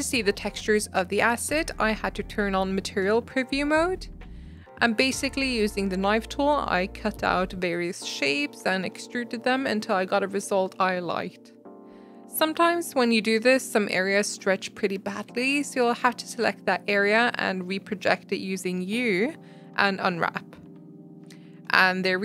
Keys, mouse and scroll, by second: 0.5-1.6 middle drag, 1.6 click, 2.0-2.3 scroll up 7, 4.1 click, 7.7 click, 8.1-9.1 middle drag, 9.1 e, 9.6 Tab, 9.7-10.3 middle drag, 10.3-10.7 scroll down 5, 10.7 middle click, 10.9 scroll up 1, 11.0 Tab, 11.2 click, 11.4 ctrl+click, 11.5 shift+middle click, 12.5 ctrl+click, 12.6-14.6 middle drag, 14.6 ctrl+click, 14.7-15.8 middle drag, 15.8 ctrl+click, 16.0 middle click, 16.6-17.1 scroll down 1, 17.1-18.1 middle drag, 18.1 ctrl+click, 20.1 u, 20.2 s, 21.7 middle click, 21.8 Tab, 22.0 middle click, 22.1 scroll up 1.